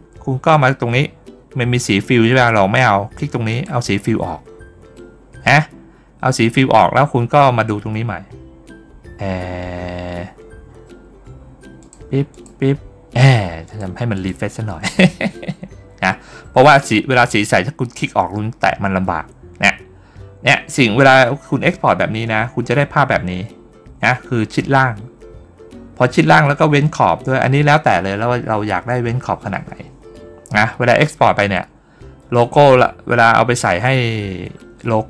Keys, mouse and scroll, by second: 3.4 click, 11.7 click, 12.2 click, 13.5 click, 14.0 click.